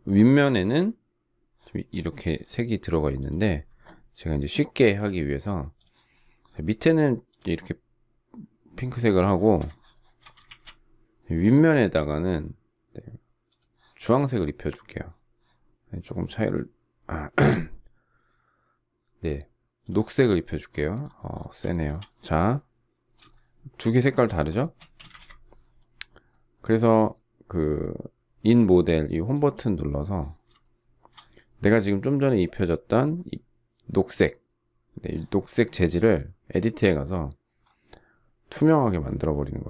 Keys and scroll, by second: 25.0 space, 25.1 Escape.